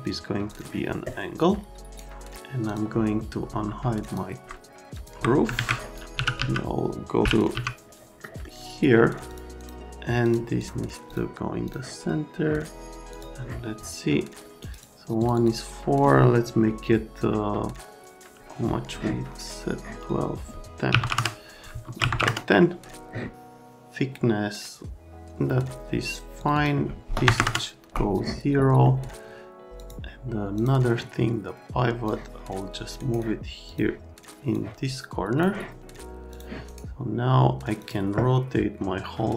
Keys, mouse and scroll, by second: 0.5 click, 2.6 click, 4.0 ctrl+click, 5.0 ctrl+click, 5.6 alt+w, 5.9-7.5 typing, 5.9 click, 8.2 right click, 9.3 click, 9.6 click, 10.2 click, 10.6 click, 11.1 click, 11.6 click, 13.1 click, 14.6 click, 14.6 right click, 15.2 click, 15.4 click, 20.9 KP_1, 21.0 KP_0, 21.1 KP_Enter, 21.9 Tab, 22.0 KP_1, 22.1 KP_0, 22.2 KP_Enter, 26.4 click, 26.5 click, 27.2 KP_0, 27.3 KP_Enter, 29.8 click, 30.5 click, 32.1 click, 33.0 scroll, 33.7 click, 34.5 click, 36.3 click, 36.7 scroll, 37.8 click.